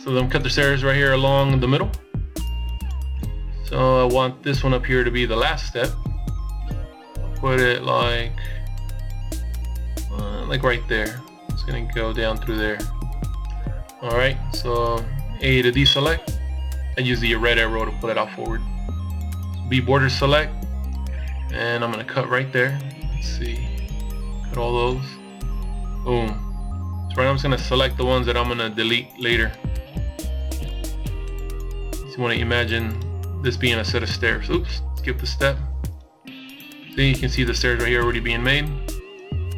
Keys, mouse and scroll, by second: 11.4 a, 17.3 a, 18.5 b, 25.3 b, 29.8 b, 32.9 b, 37.4 b.